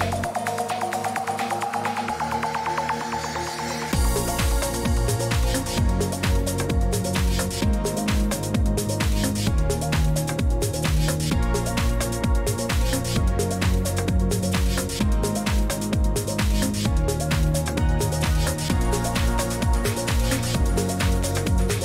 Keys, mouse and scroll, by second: 0.0-1.2 typing, 2.5-4.6 typing, 7.2-8.5 typing, 8.0 middle click, 8.0 click, 12.8 middle click, 13.7 click.